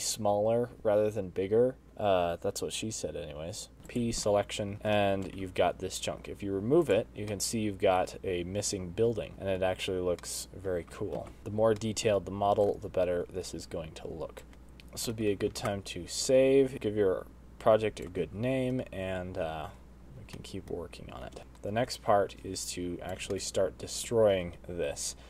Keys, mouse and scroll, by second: 0.8 z, 1.4 z, 1.7 middle click, 4.1 p, 5.2 middle click, 5.6 Tab, 5.7 click, 6.2 shift+middle click, 6.7 g, 8.5 middle click, 10.8 shift+middle click, 11.4 middle click, 11.4 scroll down 1, 11.5 alt+h, 12.0 middle click, 12.5 scroll down 1, 12.8 ctrl+z, 13.5 middle click, 14.4 shift+right click, 14.5 middle click, 14.5 click, 14.5 space, 14.8 middle click, 15.5 space, 16.0 middle click, 16.8 middle click, 18.3 shift+right click, 20.0 space, 21.5 space, 21.6 middle click, 22.7 shift+right click, 25.0 middle click.